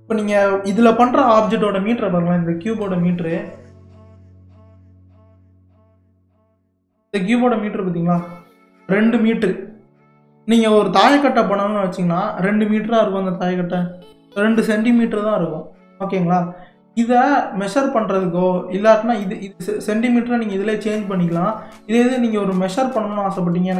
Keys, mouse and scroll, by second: 4.6-7.7 drag, 18.3-21.3 drag, 22.7-23.7 drag.